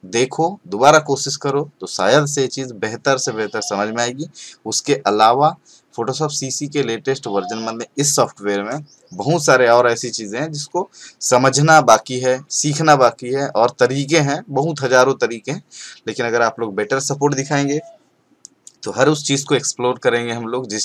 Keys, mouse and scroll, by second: 5.7-7.1 scroll down 1.